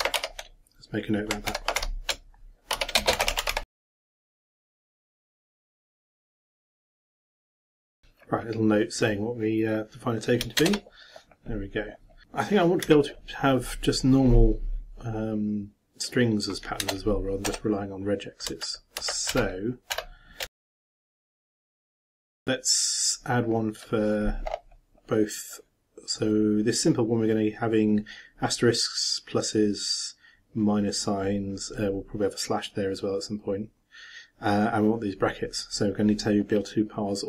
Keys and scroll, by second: 0.1 ctrl+a, 1.5 ctrl+m, 2.5-7.8 typing, 10.6 shift+Return, 20.3-21.7 typing, 22.3 shift+Return.